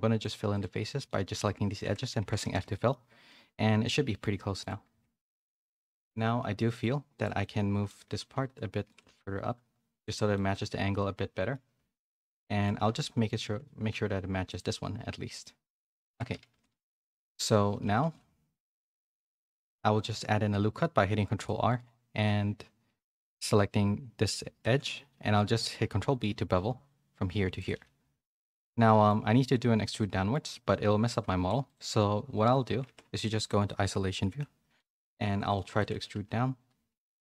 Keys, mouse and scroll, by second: 1.0 middle click, 2.2 Tab, 2.5 a, 2.6 a, 2.7 middle click, 3.2 middle click, 4.6 click, 4.9 Tab, 5.7-6.7 middle drag, 6.7 2, 7.1 click, 7.4 middle click, 8.1 g, 9.0 g, 10.4-11.6 middle drag, 11.9 shift+middle click, 12.4-15.4 middle drag, 16.0 Tab, 16.3 a, 16.5 a, 16.6 middle click, 17.1 Tab, 17.8 g, 19.4 middle click, 20.0 ctrl+r, 24.6 ctrl+b, 28.5 click, 28.8 middle click, 29.9 middle click, 31.6 click, 31.6 3, 32.8 Tab, 33.3 click, 34.2 /, 34.7 middle click, 34.8 Tab, 35.2 3, 35.4 click, 35.7 shift+middle click, 36.1 e.